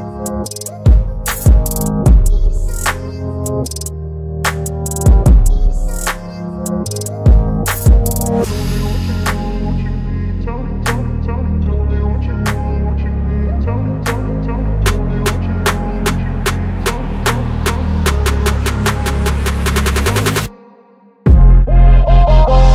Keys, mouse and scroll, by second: 2.6 ctrl+c, 3.9 click, 5.4 ctrl+v, 6.6 ctrl+a, 8.5 click, 10.0 click, 16.3 click.